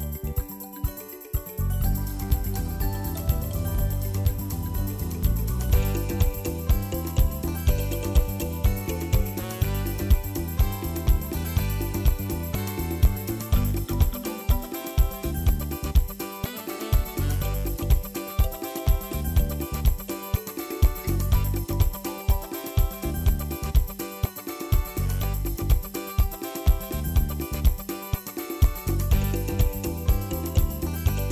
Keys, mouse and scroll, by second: 0.5 click, 1.0 click, 2.1 click, 4.2-5.2 drag, 5.6 click, 6.1-7.1 drag, 7.2 ctrl+s, 7.6 scroll down 2, 7.8-8.4 shift+middle drag, 8.4 ctrl+shift+click, 9.7 drag, 13.1 drag, 14.1-14.6 drag, 15.7-16.6 drag, 18.8-19.2 drag, 19.9 click, 21.9 shift+middle click, 22.3 click, 23.2 ctrl+s, 23.6-24.9 scroll up 2, 24.9 drag, 26.5-27.9 middle drag, 27.9-29.1 drag, 30.1-31.2 drag.